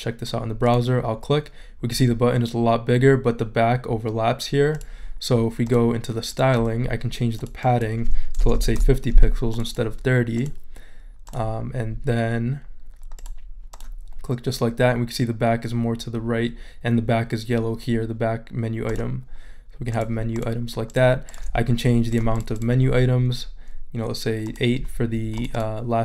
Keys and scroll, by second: 8.2-9.0 typing.